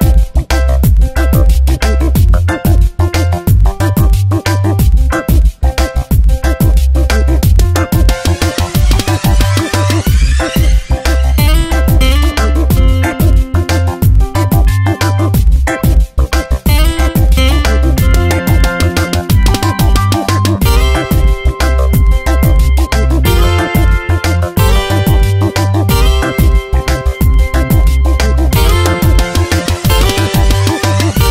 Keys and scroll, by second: 3.8 space, 12.4 Tab, 15.1 Tab, 18.6 space, 25.2 ctrl+[, 29.1 space.